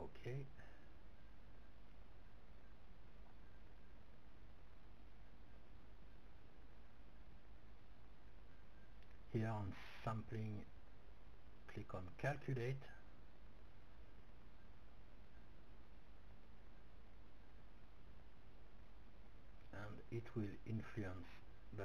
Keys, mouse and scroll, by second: 3.0-5.0 drag, 6.6-8.8 middle drag, 10.2-15.6 drag, 15.2-20.1 middle drag, 21.6-21.8 drag.